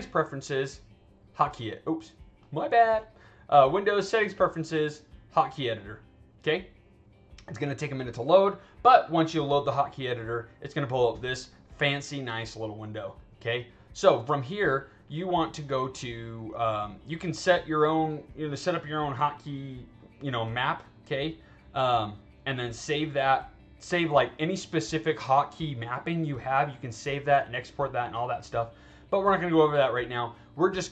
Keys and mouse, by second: 1.3 click, 2.4 click, 3.4 click, 5.3 click, 9.0-11.4 drag, 13.5-15.2 drag, 16.8 click, 17.5 click, 19.9 click, 21.5 click, 22.3 click, 22.8 click, 28.2 click, 28.7 click, 30.5 click.